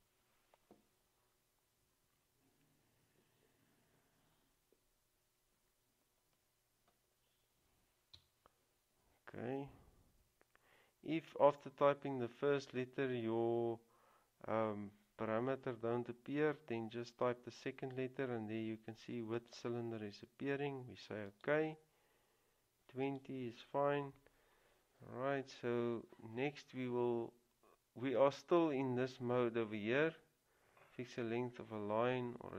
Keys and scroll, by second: 8.3 typing.